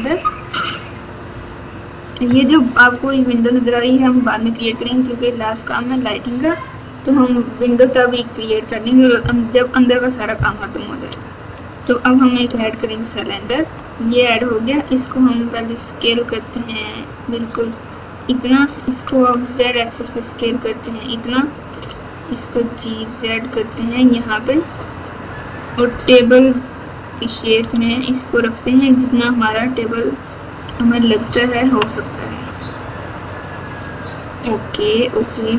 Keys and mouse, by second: 1.3 KP_4, 2.2 KP_Add, 13.6 KP_1, 14.8 s, 18.5 s, 21.7 g, 26.1 KP_4, 26.4 KP_4, 27.6 KP_Subtract, 27.8 KP_Subtract, 30.6 ctrl+KP_6, 31.2 ctrl+KP_6.